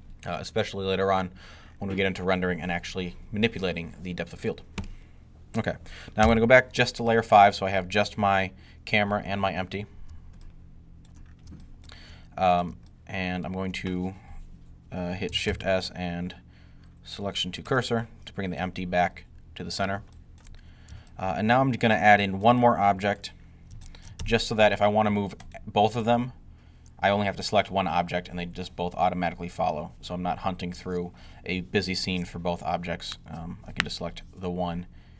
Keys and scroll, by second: 6.0 5, 15.4 s.